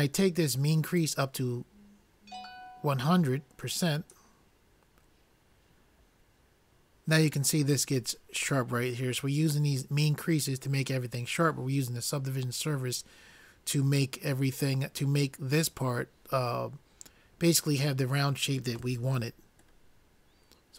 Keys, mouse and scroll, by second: 1.1-3.0 drag, 19.8-20.7 middle drag.